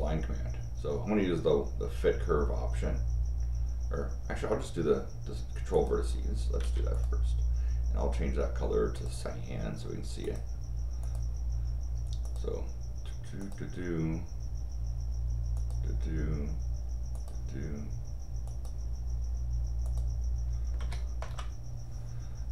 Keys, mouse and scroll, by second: 5.7 click, 6.6 Escape, 6.9 click, 8.9 click, 10.2 click, 11.0 click, 12.2 click, 13.4 click, 15.5 click, 17.1 click, 18.4 click, 19.8 click, 20.8 c, 21.2 Return.